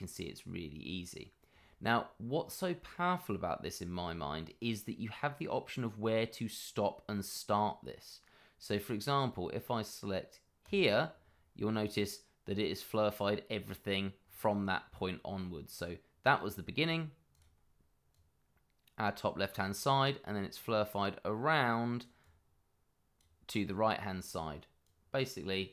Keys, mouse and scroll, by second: 1.8 scroll up 1, 10.6 click, 11.2-13.2 scroll down 1, 14.2-16.3 scroll up 1, 17.3 click, 23.5 scroll down 1, 24.8 click.